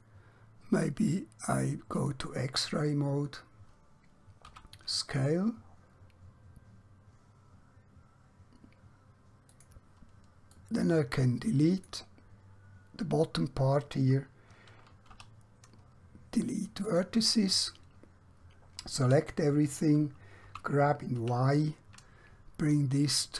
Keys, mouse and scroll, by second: 4.6 s, 9.6 click, 15.2 x, 16.8 click, 19.0 a.